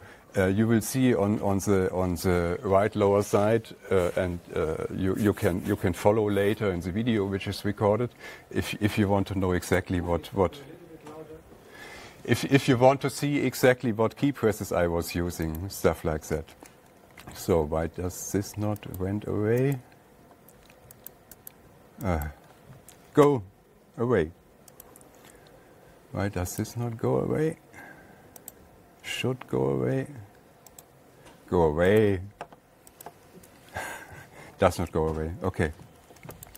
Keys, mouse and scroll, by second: 10.2 click, 16.0 click, 17.0 alt+Tab, 17.7 alt+Tab, 19.4 click, 19.6 super+u, 20.2 click, 21.6 click, 22.0 click, 22.7 click, 25.3 click, 25.5 super+u, 27.1 click, 29.0 right click, 31.3 right click, 32.4 click, 34.7 alt+Tab, 36.0 alt+Tab, 36.4 alt+Tab.